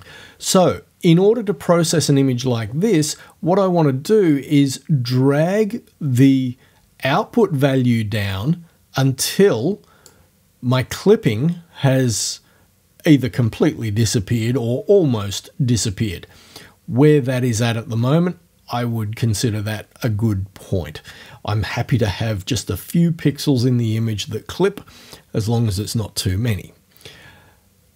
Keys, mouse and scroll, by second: 4.4-10.3 drag, 10.3-12.4 middle drag.